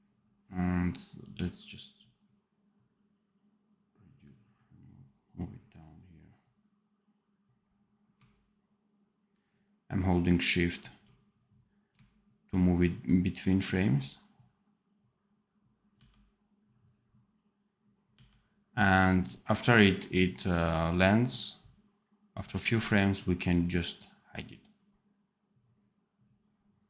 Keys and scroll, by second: 15.8 d.